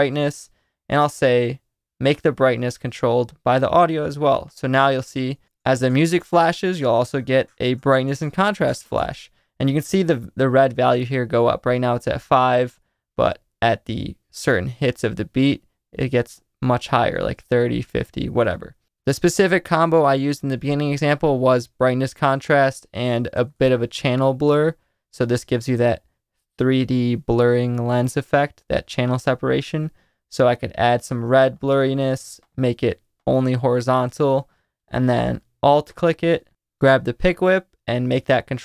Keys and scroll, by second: 5.4 space, 9.0 space, 22.8-24.1 typing.